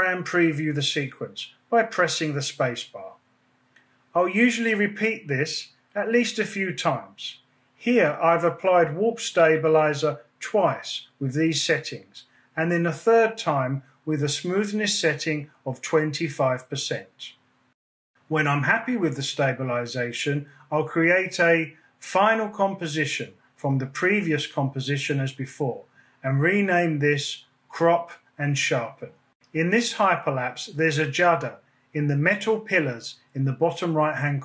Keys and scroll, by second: 2.9 space, 16.0 space, 24.4-27.0 typing, 27.6 Return, 33.0 space.